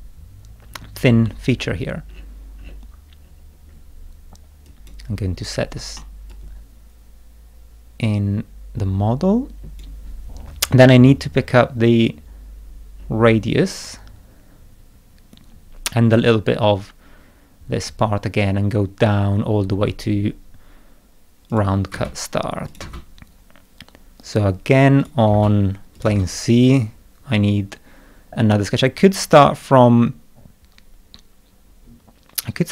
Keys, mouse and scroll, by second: 0.4 middle click, 1.1 middle click, 1.6-3.5 scroll down 8, 4.6 click, 6.0-9.6 middle drag, 6.3-9.8 drag, 11.9-12.5 scroll down 2, 13.0-13.3 scroll down 1, 13.6-14.1 scroll up 3, 14.8 scroll down 2, 15.1 scroll up 2, 21.5 click, 21.9 space, 22.7 click, 22.8 space, 24.2 middle click, 25.0 click, 25.3 space, 25.9 click, 26.1 space.